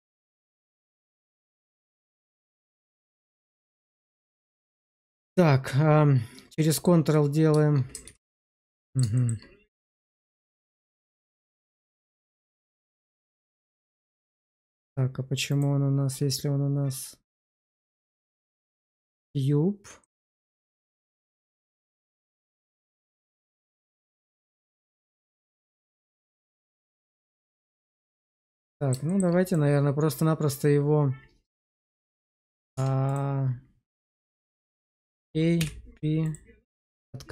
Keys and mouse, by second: 1.1 Tab, 1.6 shift+z, 2.0 middle click, 2.6 shift+middle click, 3.2 shift+middle click, 4.0 q, 7.9 ctrl+z, 8.5 middle click, 9.1 shift+middle click, 10.2 shift+middle click, 10.6 click, 11.0 q, 15.4 click, 17.3 click, 19.9-21.1 middle drag, 22.0 click, 23.6 middle click, 25.2 click, 27.1 click, 28.2 middle click, 29.0 shift+middle click, 29.4 click, 31.6 p, 32.4 click, 32.6 Tab, 33.0 click, 34.6 a, 35.5 p.